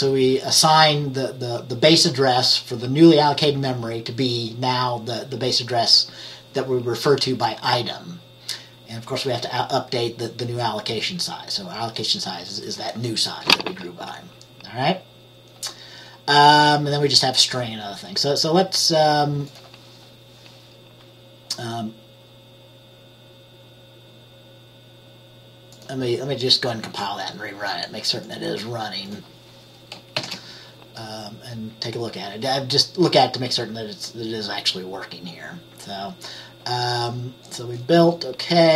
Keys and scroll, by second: 30.3 ctrl+b.